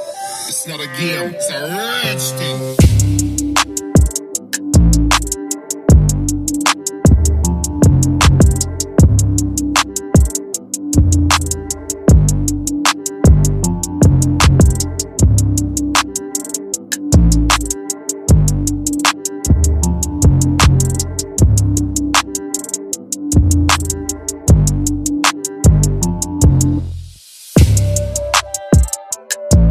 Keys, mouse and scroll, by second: 11.3 z, 17.0 z, 17.1 click, 22.4-26.5 drag, 29.1-29.7 alt+shift+drag.